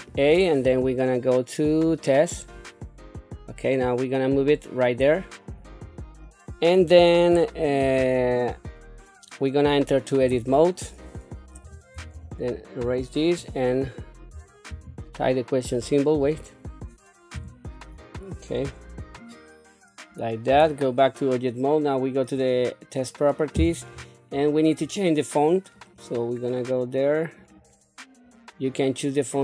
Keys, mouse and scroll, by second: 2.5 shift+a, 4.4-5.5 drag, 5.8-6.6 scroll up 3, 6.9 shift+middle click, 10.2 Tab, 11.6 BackSpace, 12.0 BackSpace, 12.1 BackSpace, 12.8 BackSpace, 14.7 shift+-, 16.2 BackSpace, 17.0 shift+BackSpace, 17.3 shift+/, 20.5 Tab, 22.3 click, 23.9-25.4 scroll down 6, 25.8 click, 27.4 click.